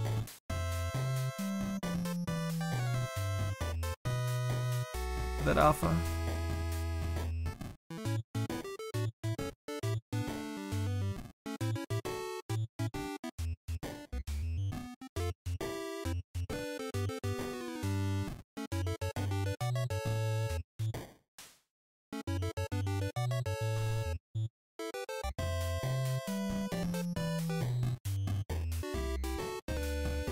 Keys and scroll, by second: 3.6 s, 12.7 s, 13.9 s.